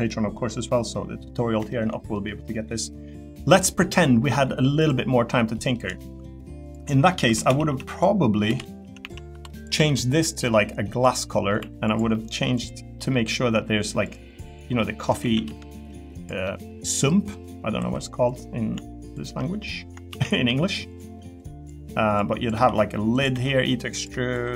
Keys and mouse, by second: 0.0-1.7 drag, 1.7 shift+middle click, 2.1 middle click, 2.8 middle click, 3.5 middle click, 4.8 click, 5.5 middle click, 6.0 shift+middle click, 6.7 click, 6.9 middle click, 7.2-9.7 typing, 7.9 click, 11.0 click, 11.3 middle click, 11.6 3, 11.9 click, 12.1 middle click, 12.9 middle click, 15.2 a, 15.4 g, 16.1 click, 16.5 middle click, 17.8 3, 19.4 middle click, 20.1 shift+d, 20.5 s, 20.9 click, 21.4 click, 22.5 e, 23.3 e, 24.3 3.